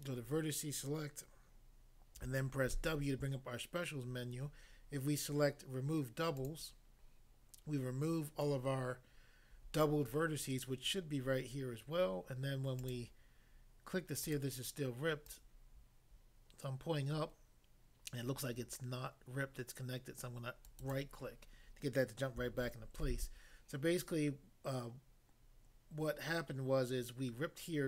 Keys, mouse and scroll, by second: 2.8 w, 6.4 click, 12.8 click, 12.9 click, 14.2 click, 14.4 click, 15.3 click, 20.7 right click, 20.9 click, 23.0 a.